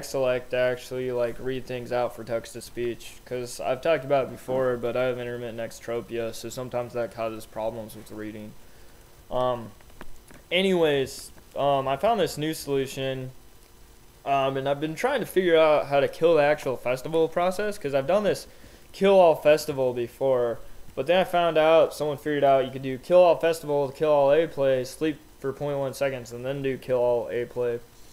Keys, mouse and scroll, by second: 9.2 l, 10.8 j, 11.9 k, 18.1-20.2 typing.